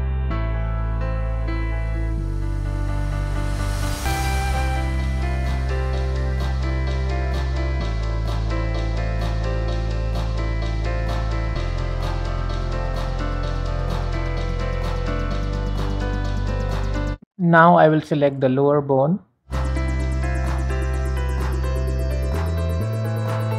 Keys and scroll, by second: 7.7 t, 8.7 t, 10.3 Tab, 12.5 Escape.